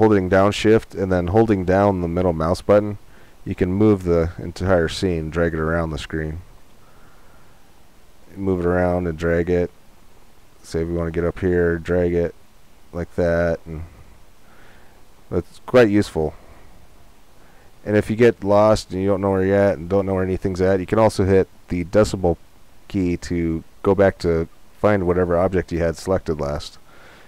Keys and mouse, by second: 5.0-8.0 middle drag, 18.0 middle click, 18.2 middle click.